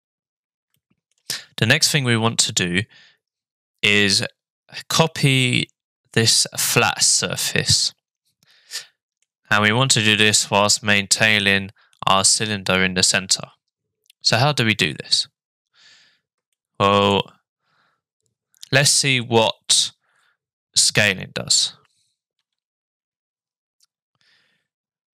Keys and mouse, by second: 0.9 shift+middle click, 7.4-9.2 middle drag, 16.6 shift+middle click, 22.3 s.